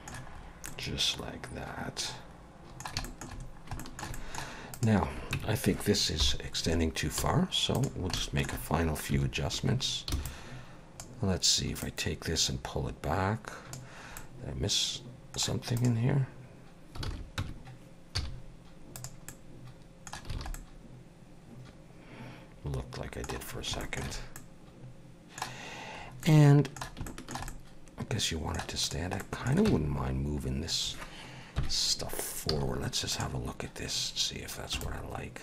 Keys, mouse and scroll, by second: 0.3-0.6 scroll up 3, 0.7 middle click, 3.0 shift+middle click, 3.4 scroll down 2, 3.8 shift+middle click, 4.1 middle click, 4.7 click, 5.4 Tab, 6.2 KP_7, 7.3 z, 8.2 shift+middle click, 9.1 1, 9.4 scroll up 2, 10.1 b, 11.8 click, 14.2 middle click, 15.8 click, 17.1 alt+a, 17.4 Tab, 18.2 z, 19.3 middle click, 20.4 alt+a, 20.6 middle click, 23.5 scroll down 1, 23.8 shift+middle click, 24.4 middle click, 26.0 scroll up 1, 26.2 middle click, 27.1 shift+middle click, 27.5 middle click, 28.8 click, 29.2 middle click, 29.7 Tab, 31.6 KP_1, 32.5 z, 34.7 b.